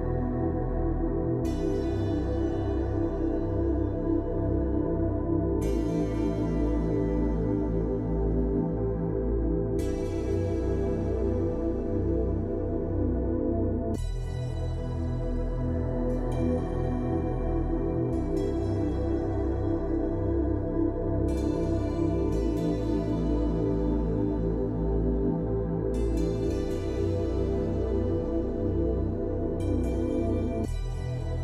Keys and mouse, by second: 0.3 shift+middle drag, 0.8 Tab, 2.0 shift+middle drag, 2.7 Tab, 3.3 Tab, 5.4 ctrl+click, 5.9 middle click, 6.5 middle click, 7.3-7.7 shift+drag, 7.7 shift+middle click, 8.2-8.6 shift+middle drag, 8.9 shift+middle click, 9.2 shift+middle click, 10.0 middle click, 10.9 shift+click, 11.4 shift+click, 12.1 click, 13.1 shift+click, 13.8 shift+click, 14.5 ctrl+click, 15.2-15.7 middle drag, 16.1 shift+middle click, 16.8 shift+middle click, 17.1 shift+middle click, 17.9 shift+click, 18.8 shift+middle click, 19.7 shift+middle click, 20.3 shift+middle click, 22.0 ctrl+click, 22.6 middle click, 23.6 shift+click, 23.9 click, 26.0 Tab, 26.5-27.5 drag, 28.4 click.